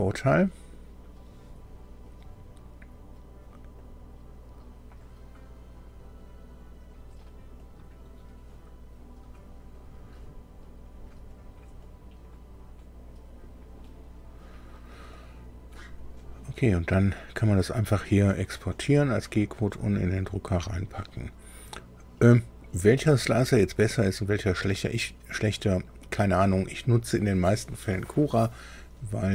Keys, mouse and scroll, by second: 3.8 click, 7.6 click, 9.7 click, 11.3 click, 11.8 click, 15.1 click, 17.6 click, 20.5 click.